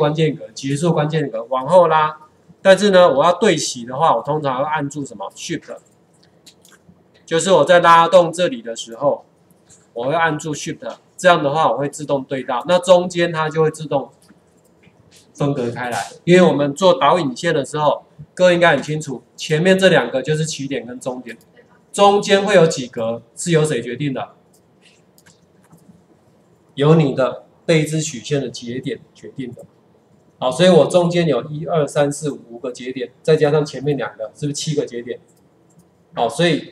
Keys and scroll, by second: 7.5 ctrl+4, 17.6 ctrl+4, 28.1 ctrl+4.